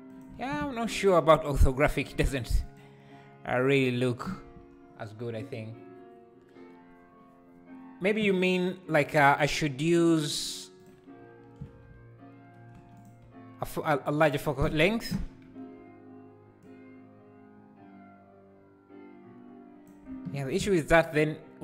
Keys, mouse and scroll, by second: 0.5 ctrl+z, 2.7-12.9 drag, 12.9 KP_0, 16.7 click, 20.5 ctrl+z.